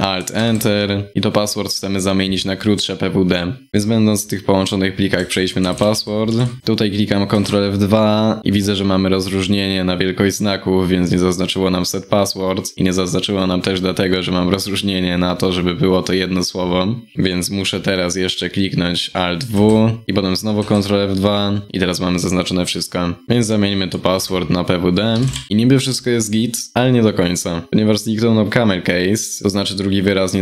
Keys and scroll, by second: 0.4 alt+Return, 5.2 ctrl+Right, 5.3 ctrl+Right, 5.5 ctrl+Down, 5.8 ctrl+Down, 6.6 ctrl+Right, 6.9 ctrl+F2, 19.1 alt+w, 20.0 alt+c, 20.1 ctrl+F2.